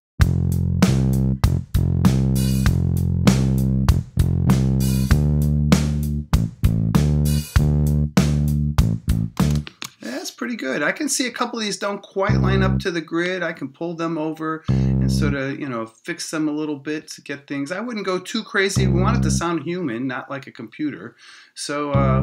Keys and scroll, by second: 0.0 space, 9.4 space, 9.8 Return.